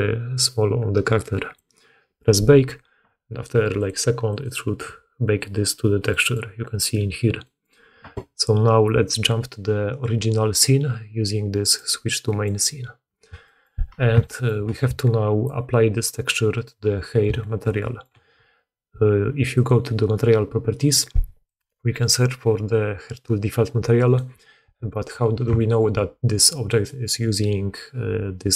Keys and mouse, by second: 5.6 click, 6.1 click, 7.3-19.6 drag, 19.6-21.4 middle drag, 21.4-28.5 drag.